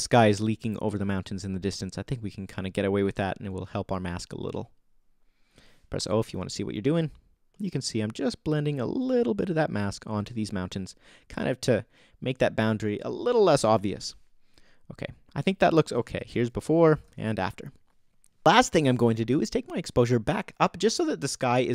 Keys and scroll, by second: 6.0 o, 13.7 o, 16.4 BackSpace, 17.0 super+BackSpace, 18.0 super+z.